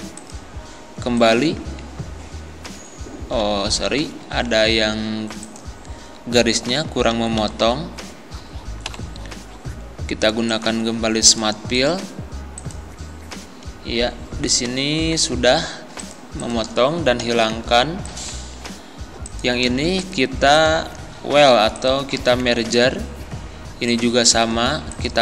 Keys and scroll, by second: 3.5 ctrl+z, 6.7 Down, 8.9 Up, 17.2 Delete.